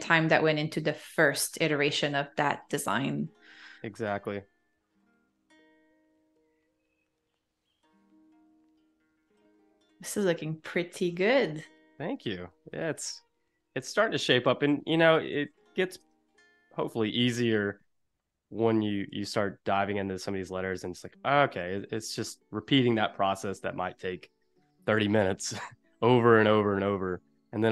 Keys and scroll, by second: 0.9 super+c, 1.4 super+z, 2.1 BackSpace, 3.6 super+f, 6.6 -, 7.6 a, 8.1 space, 9.1 super+-, 9.9 super+=, 11.9 -, 12.6 a, 13.6 super+-, 14.5 space, 15.2 super+=, 16.1 space, 24.9 v.